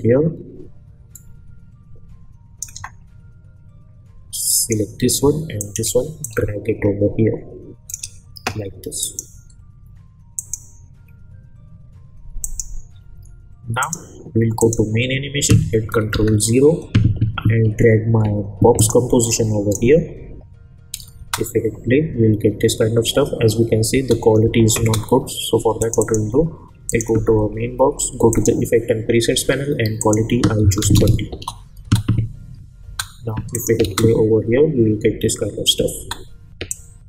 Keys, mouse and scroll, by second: 5.6 shift+click, 6.5-8.1 shift+drag, 16.1 ctrl+0, 18.7-19.8 drag, 21.2 space, 23.9 space, 25.8 click, 31.3 Return, 31.8 space, 33.5 click, 33.8 space, 35.9 space, 36.7-37.0 drag.